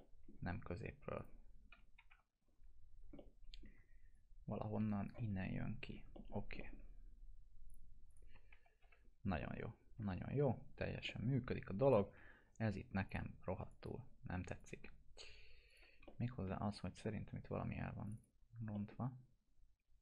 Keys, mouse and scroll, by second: 1.1 click, 1.7 p, 2.7 scroll up 1, 3.1-3.7 alt+middle click, 4.1-5.0 click, 5.1-6.1 alt+middle click, 6.3 scroll down 1, 6.5 alt+middle click, 7.6 click, 8.5 F4, 9.0 scroll down 1, 9.4-10.0 alt+middle click, 10.2-10.8 scroll up 1, 11.0 middle click, 11.8 click, 12.0 F4, 13.0 click, 16.0-16.6 alt+middle click, 17.0 scroll up 1, 18.0 click, 18.4 scroll down 1, 18.7 middle click.